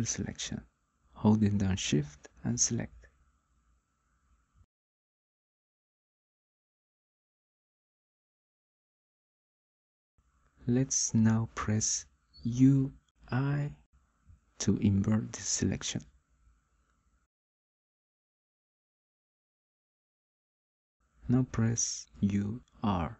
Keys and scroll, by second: 11.8 u, 22.6 u.